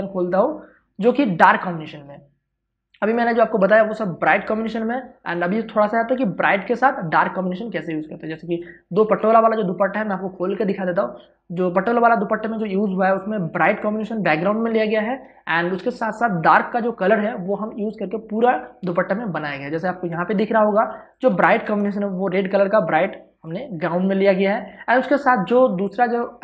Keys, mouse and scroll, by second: 2.9 click, 5.4 click, 9.1 Return, 20.1 ctrl+space, 20.4 ctrl+click, 20.6 ctrl+space, 21.4 space, 21.7 i, 22.6-26.4 drag.